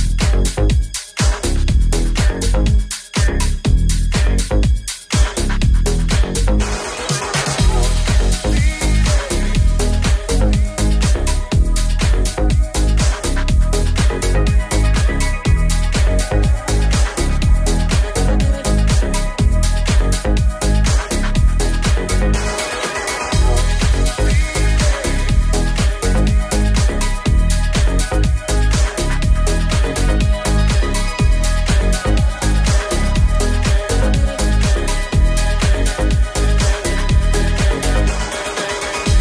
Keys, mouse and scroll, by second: 2.5 right click, 2.8 shift+middle click, 3.3 shift+right click, 3.3 shift+middle click, 3.5 shift+right click, 3.5 shift+middle click, 3.8 shift+right click, 3.9 shift+middle click, 4.1 shift+right click, 4.2 shift+middle click, 4.4 shift+right click, 4.4-39.2 shift+middle drag, 8.5 g, 9.6 e, 12.4 s, 12.4 g, 13.4 i, 17.3 ctrl+z, 18.0 i, 20.3 ctrl+KP_Add, 24.6 g, 28.1 right click, 28.3 shift+right click, 28.5 shift+right click, 28.7 shift+right click, 29.0 shift+right click, 29.2 shift+right click, 31.2 s, 31.2 g, 34.8 e, 34.8 s, 37.7 i, 38.4 ctrl+KP_Add.